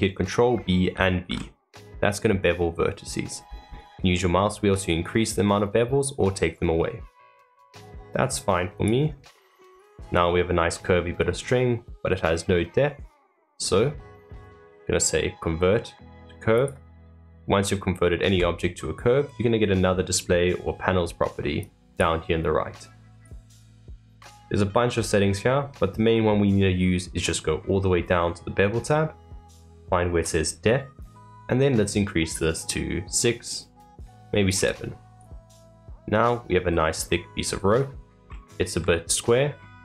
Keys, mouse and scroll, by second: 9.1 middle click, 10.1-11.2 middle drag, 11.2-11.8 scroll up 1, 11.8-13.4 middle drag, 13.4-17.0 right drag, 17.0-20.0 middle drag, 21.6-23.5 drag, 27.0-28.7 scroll down 1, 28.7-29.0 scroll down 2, 31.4-34.5 drag, 35.1 click, 35.5-36.6 middle drag, 36.6-37.0 scroll up 2, 37.0-39.7 middle drag, 39.7 click.